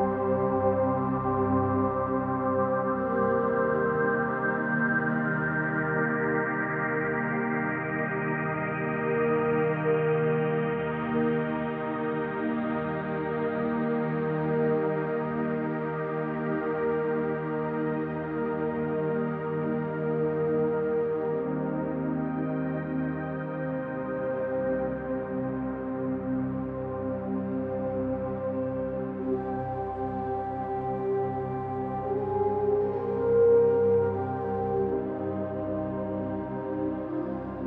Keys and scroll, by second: 25.2-27.9 typing, 28.4 Return, 30.9-33.7 typing, 35.1 0, 35.7 2, 36.0 Return.